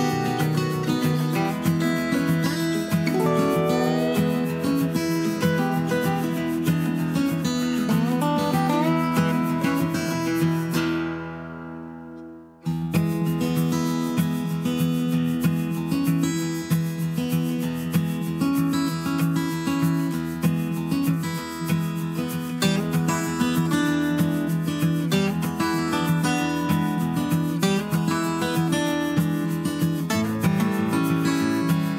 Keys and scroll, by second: 8.5-9.4 typing, 21.6 Right, 23.9 super+a.